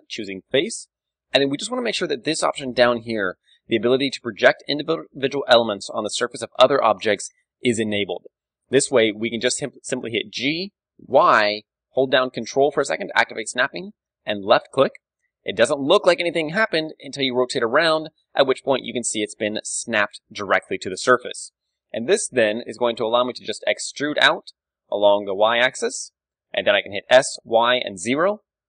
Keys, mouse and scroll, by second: 6.8-8.8 drag, 9.2-12.0 middle drag, 9.2-10.4 scroll up 1, 10.4-12.0 scroll up 1, 10.4 g, 14.5-16.2 drag, 16.2-22.3 middle drag, 20.9 KP_1, 21.9 KP_3, 23.3 e, 26.5-28.3 drag, 27.0 s, 28.3 g.